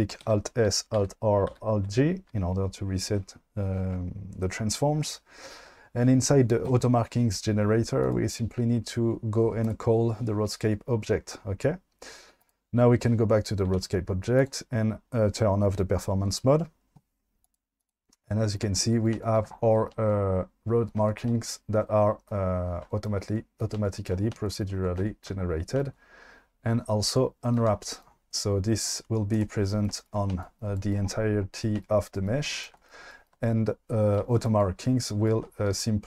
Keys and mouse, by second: 0.3 alt+s, 1.0 alt+r, 1.5 alt+g, 8.1 click, 12.4 click, 13.7 q, 17.4 click, 17.9 click, 21.3-22.8 shift+middle drag, 35.7 q.